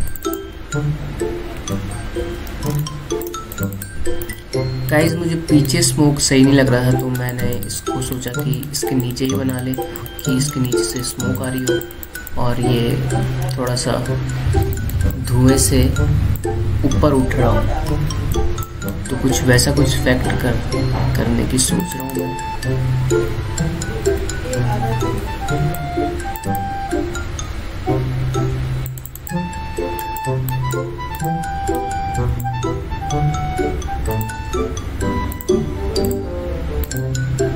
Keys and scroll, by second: 3.4 alt+space, 14.1 space, 18.5 ctrl+t, 24.7 ctrl+j, 25.3 ctrl+t, 26.3 ctrl+shift+t.